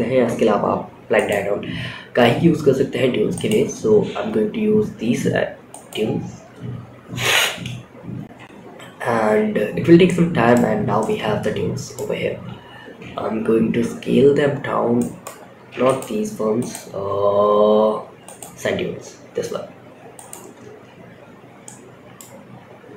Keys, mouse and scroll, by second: 0.5-2.8 drag, 5.0-8.6 drag, 9.4-9.8 middle drag, 10.0 scroll down 3, 10.3-11.2 middle drag, 11.5 scroll up 3, 12.1 s, 15.0 x, 15.9-17.7 drag, 19.4-22.9 drag.